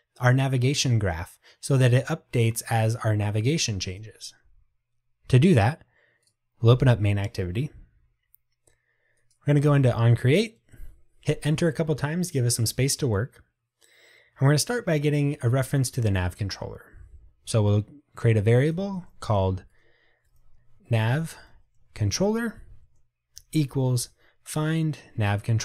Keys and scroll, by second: 25.2 Return.